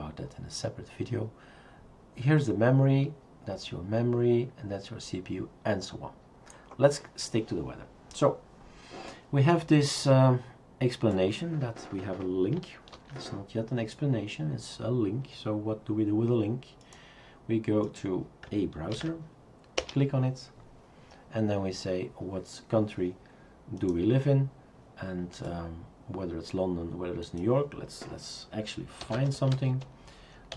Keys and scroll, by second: 13.0 ctrl+c, 18.9 ctrl+v, 19.8 Return, 28.8-30.5 typing.